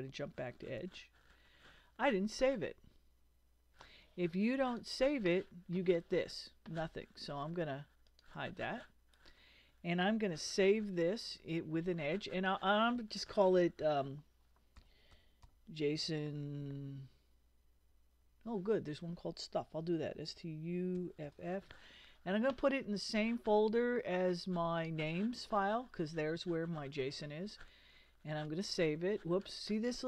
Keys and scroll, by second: 0.8 super+Tab, 10.5 super+s, 14.5-15.9 typing, 17.9 s, 19.8 s, 20.3 t, 21.0 u, 21.2 f.